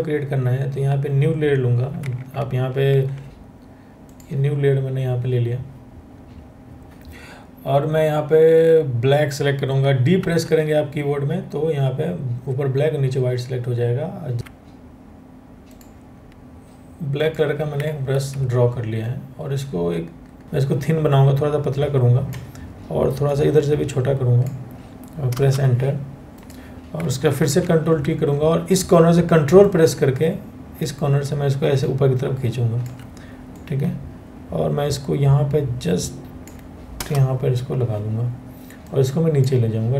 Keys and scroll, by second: 3.2 Escape, 5.6 Escape, 9.8 d, 14.4 ctrl+z, 17.7 ctrl+t, 25.0 Return, 27.0 ctrl+t, 36.6 Return.